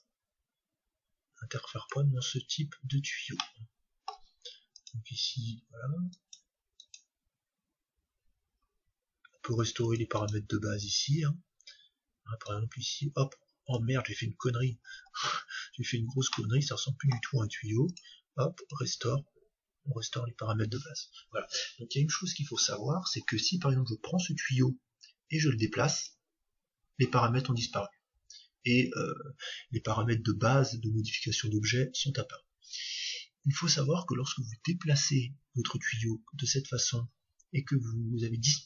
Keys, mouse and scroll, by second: 0.0-1.9 drag, 2.8-5.1 middle drag, 4.8-6.6 drag, 9.9-12.1 drag, 12.5-14.4 drag, 14.4-19.8 middle drag, 17.9-19.8 drag, 25.5-29.6 drag.